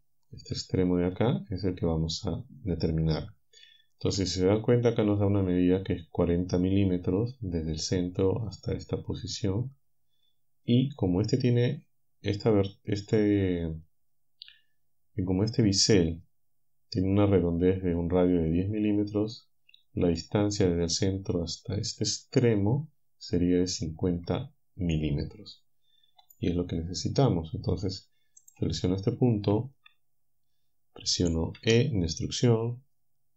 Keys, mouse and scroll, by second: 26.3-28.7 alt+drag, 31.6 e.